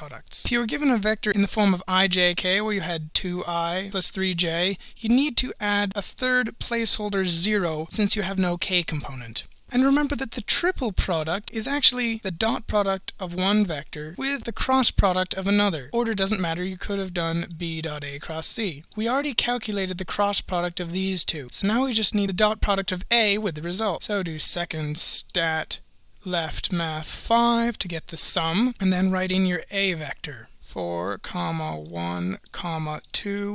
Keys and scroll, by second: 26.4 (, 27.7 5, 30.0-33.1 typing.